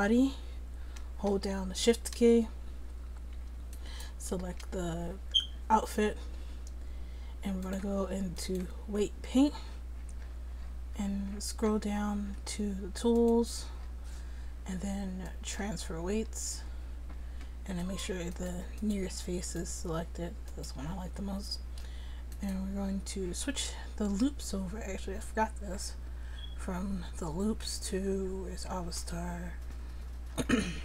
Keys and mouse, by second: 5.5 middle click, 7.7-9.6 drag, 13.2-17.2 drag, 17.8 click.